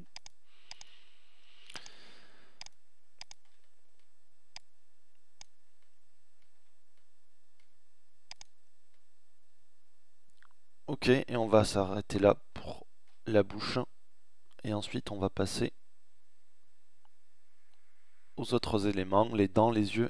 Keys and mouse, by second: 5.5 Tab, 9.8-12.2 middle drag, 15.2 middle click, 15.5 middle click.